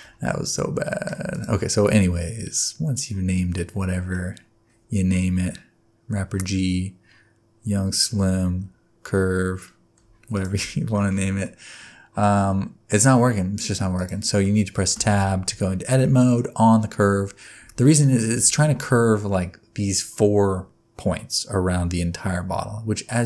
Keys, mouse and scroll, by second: 0.3 middle click, 1.3 click, 1.8 middle click, 5.0-8.2 scroll up 1, 10.3 click, 11.0 shift+middle click, 11.4 middle click, 14.0 click, 14.4 middle click, 15.0 Tab, 16.0 middle click, 17.6 Tab, 18.0 middle click, 18.3 Tab.